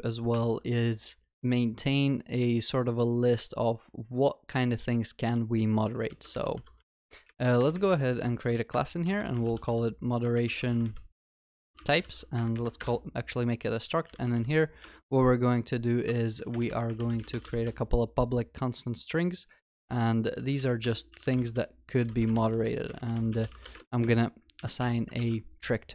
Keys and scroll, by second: 0.4 alt+Insert, 14.9 Tab, 25.3 ctrl+s.